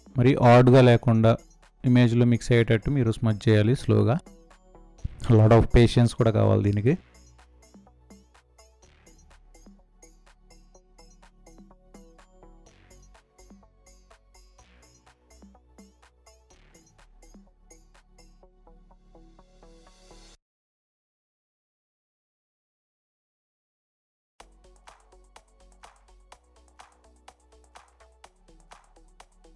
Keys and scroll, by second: 11.6 space, 19.3 ctrl+z, 22.6 ctrl+z, 27.0 space, 27.9 space.